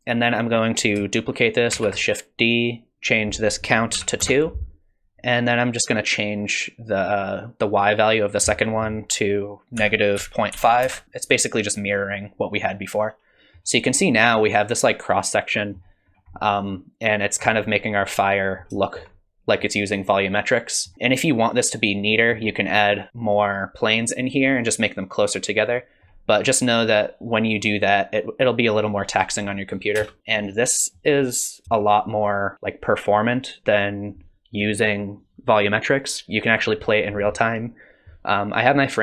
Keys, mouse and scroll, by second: 1.9 shift+d, 3.1 click, 8.1 click, 12.5 middle click, 14.3 middle click, 16.2-17.0 scroll down 2, 16.4 middle click, 17.7 scroll up 1, 18.1 middle click, 18.9 shift+middle click, 19.2 scroll up 1, 19.7 middle click, 20.9 middle click, 20.9 scroll down 1, 25.9 middle click, 30.1 space, 30.2 scroll up 1, 30.6 middle click, 31.5 scroll down 1, 31.6 shift+middle click.